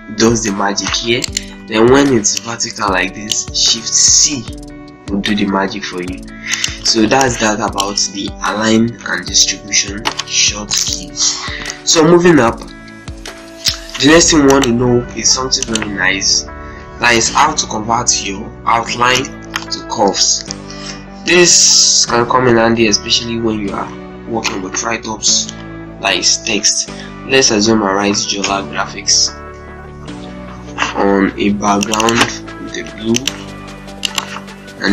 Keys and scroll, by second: 0.8 z, 1.4 ctrl+space, 4.0 shift+c, 8.7 shift+F4, 9.6 Delete, 14.9 F8, 27.3-29.6 typing, 30.2 ctrl+space, 34.7 ctrl+space.